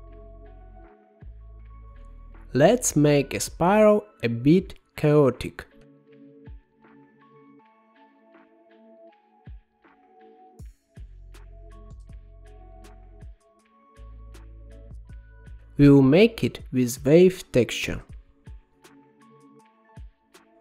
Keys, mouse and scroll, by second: 1.8 middle click, 2.3-3.1 scroll down 13, 3.1-4.7 middle drag, 4.7-6.1 scroll up 11, 6.1 click, 6.7 shift+d, 9.4 middle click, 10.3-11.5 scroll down 2, 11.5-13.1 drag, 13.1-14.2 middle drag, 14.2 g, 15.5 shift+a, 19.7-20.6 scroll up 6.